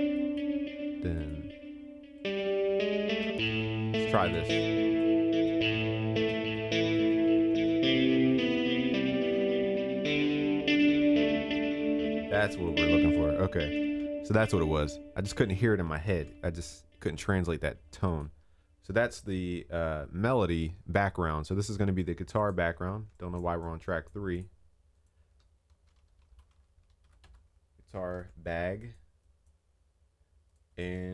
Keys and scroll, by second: 7.5 ctrl+s, 13.8 ctrl+s, 28.1 ctrl+s.